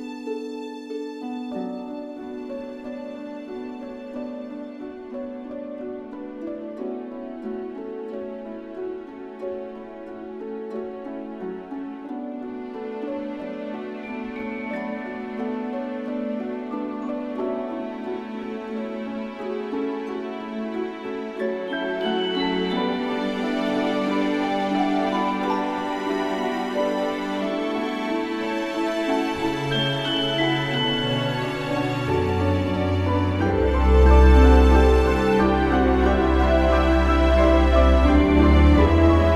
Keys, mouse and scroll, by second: 12.0 Tab, 12.8 a, 18.9-26.0 drag, 26.5 ctrl+Tab, 27.5 click, 36.7 middle click, 37.4 a, 37.8 middle click, 38.2 Tab, 39.1-39.3 middle drag.